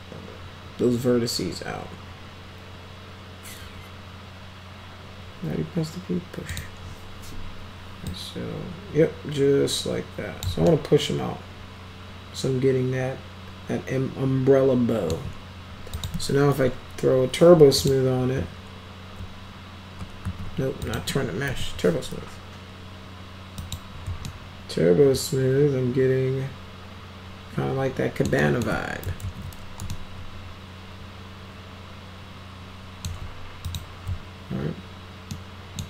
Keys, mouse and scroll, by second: 6.5 click, 8.1-10.4 drag, 10.7-15.1 alt+middle drag, 16.0 click, 16.5 t, 17.8 click, 20.2 ctrl+z, 20.9 click, 21.5 t, 23.6 click, 24.3-25.2 alt+middle drag, 25.2-27.5 alt+right drag, 27.5-28.3 alt+middle drag, 28.4 alt+middle drag, 29.2 alt+x, 29.9-33.1 alt+middle drag, 33.7 click, 35.3 alt+middle click.